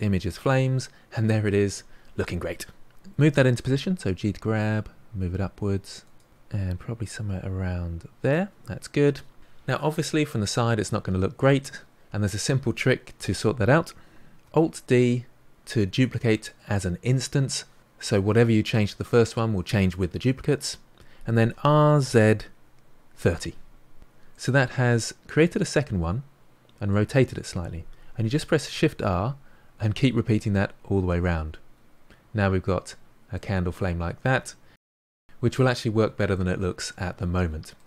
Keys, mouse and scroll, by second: 2.9 g, 5.1-5.6 middle drag, 5.6-6.4 scroll up 3, 6.4-7.6 shift+middle drag, 7.6 g, 9.7 scroll up 1, 9.9-14.3 middle drag, 14.4 alt+d, 24.3-28.5 middle drag, 28.5-29.7 typing, 30.5-32.2 middle drag, 32.2 ctrl+z, 32.7-34.5 middle drag, 34.5-35.1 scroll down 4, 35.1-37.8 shift+middle drag.